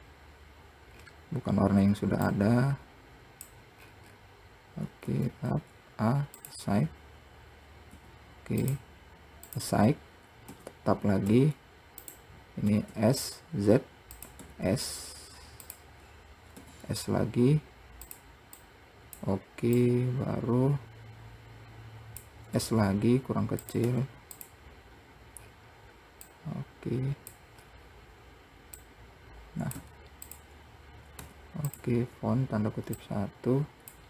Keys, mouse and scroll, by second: 1.3-2.6 scroll down 3, 2.6-4.1 drag, 4.1 scroll up 3, 5.4 Tab, 8.2 z, 9.8 click, 10.8 Tab, 13.0 s, 16.3-16.9 scroll up 3, 16.9 s, 18.9 click, 20.1 click, 22.8 s, 25.7-26.3 scroll down 5, 26.5 click, 27.8-28.2 scroll up 7, 29.1 click, 30.1 `, 31.5 `, 33.3 click.